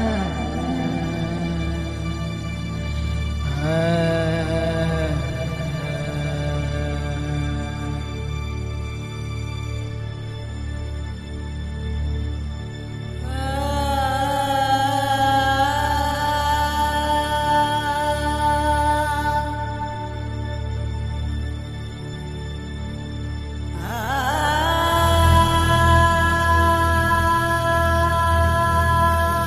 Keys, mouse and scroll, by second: 0.0 ctrl+r, 1.1 shift+z, 2.2 shift+z, 2.5 ctrl+r, 3.2 shift+z, 4.5-6.8 middle drag, 7.1 middle click, 8.1 middle click, 9.1 middle click, 9.3 KP_0, 9.5-11.4 middle drag, 11.8 middle click, 12.6 click, 13.1 middle click, 14.4 middle click, 15.5 KP_1, 15.9 shift+z, 16.0-17.0 middle drag, 16.3 Tab, 17.2 shift+a, 18.2 s, 19.7 click, 20.7 KP_0, 21.2 click, 22.0 click, 22.8-23.9 drag, 24.0 click, 24.3 s, 24.9 click, 25.7 click, 26.6 click, 27.3 s, 27.8 click, 28.9 click.